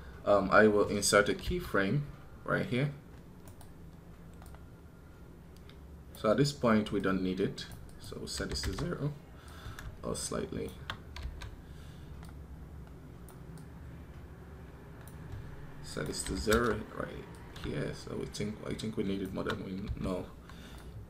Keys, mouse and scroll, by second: 3.3 right click.